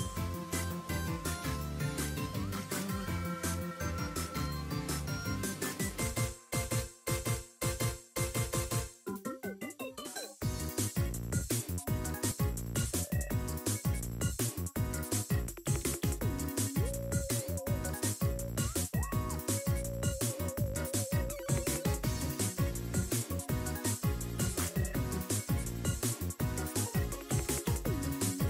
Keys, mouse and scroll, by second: 2.4 r, 6.7 r, 8.5 r, 12.9 scroll down 1, 13.1-13.5 scroll up 1, 13.5 click, 13.9 scroll down 4, 14.0 middle click, 14.3 shift+middle click, 14.5 middle click, 15.0 shift+middle click, 15.2-15.5 scroll up 3, 15.3 middle click, 15.6 shift+middle click, 15.9 scroll down 2, 16.0 middle click, 16.2 shift+middle click, 16.5 n, 17.1 click, 18.4 n, 18.7 scroll down 1, 18.8-19.9 middle drag, 20.0 scroll up 3, 20.1 middle click, 20.4 shift+middle click, 23.4 click, 24.9 scroll up 2, 25.2 shift+middle click, 26.2 click, 26.7 click, 28.1 click.